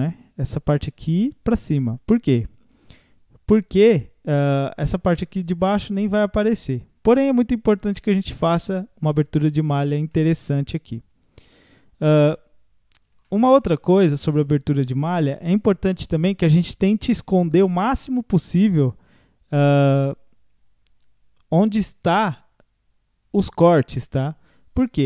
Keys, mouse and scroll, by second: 5.6-9.6 middle drag, 10.1-14.2 middle drag, 14.2-14.5 scroll up 1, 24.7-25.0 drag.